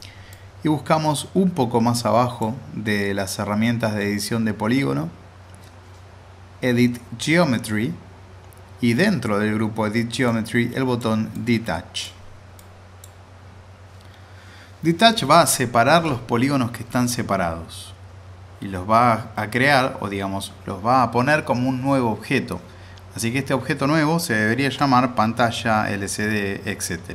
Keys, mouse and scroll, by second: 0.3-2.5 drag, 10.2-11.2 drag, 25.2 shift+Num_Lock.